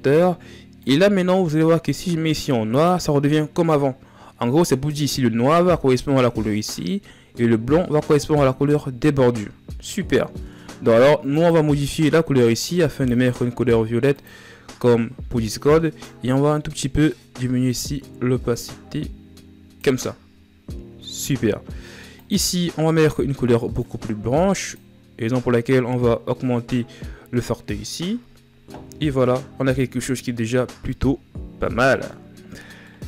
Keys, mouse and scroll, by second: 22.3 click, 28.6 scroll down 3, 32.7-33.0 middle drag.